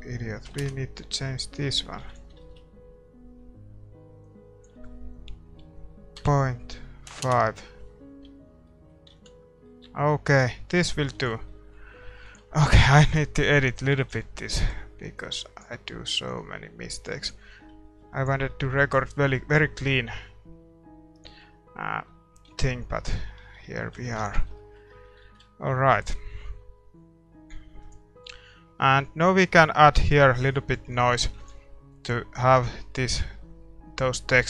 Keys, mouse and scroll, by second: 0.6 click, 1.4-3.5 scroll up 1, 3.5-7.2 scroll up 1, 8.6 middle click, 9.1 ctrl+s, 11.2 ctrl+s, 12.2 ctrl+s, 14.0 ctrl+s, 15.2-18.8 drag, 15.2 middle click, 17.5 scroll up 1, 17.8-20.3 middle drag, 18.1 ctrl+s, 22.5 shift+z, 23.4 a, 23.7 a, 24.0 a, 24.5 ctrl+s, 25.4 shift+z, 27.8-32.7 right drag, 32.7 ctrl+s, 32.7 click, 32.7-34.4 middle drag.